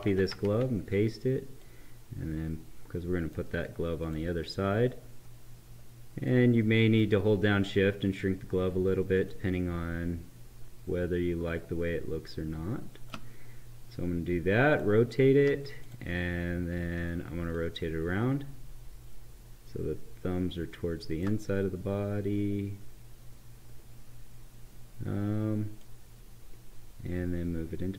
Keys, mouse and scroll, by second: 0.0 ctrl+c, 1.5-3.9 drag, 6.5-9.1 right drag, 9.1-14.7 shift+drag, 12.4 shift+click, 17.7-21.3 shift+drag, 25.7-27.9 drag.